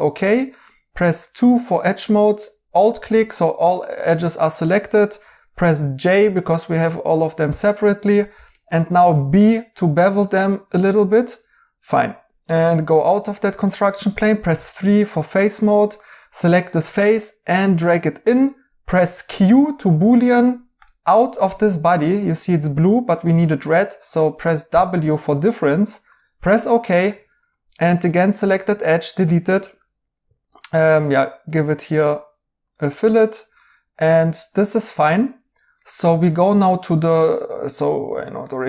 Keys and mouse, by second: 0.4 2, 4.1 right click, 7.4 j, 8.8 b, 11.1 right click, 13.1 right click, 13.9 3, 19.2 q, 24.6 w, 27.0 2, 28.5 x, 33.5 right click, 37.2 right click.